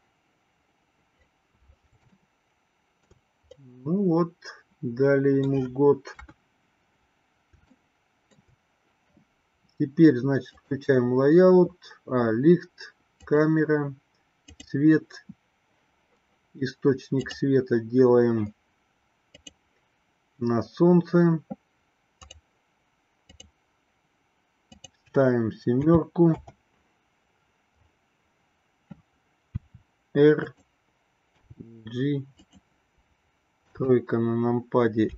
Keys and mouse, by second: 0.0 click, 2.2-3.3 shift+middle drag, 3.9-5.7 middle drag, 6.3 KP_1, 8.0-8.9 shift+middle drag, 10.7 click, 13.5 click, 15.1 click, 23.5 click, 25.0-26.8 drag, 29.7 r, 31.7 g, 33.8 KP_3.